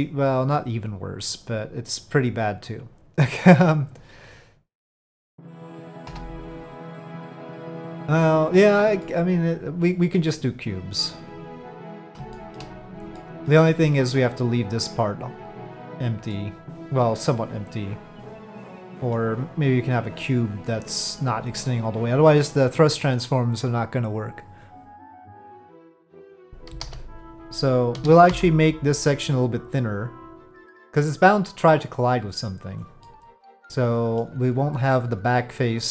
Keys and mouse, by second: 0.3 click, 3.8-5.1 drag, 6.1 KP_Divide, 6.8 click, 7.2-8.6 middle drag, 9.0-12.0 middle drag, 12.3 shift+middle drag, 13.1-13.5 middle drag, 16.3-19.1 middle drag, 25.2 middle click, 26.7 KP_5, 26.8 KP_7, 27.9 s, 30.7-32.7 drag, 33.0-34.2 middle drag, 35.8-35.9 middle drag.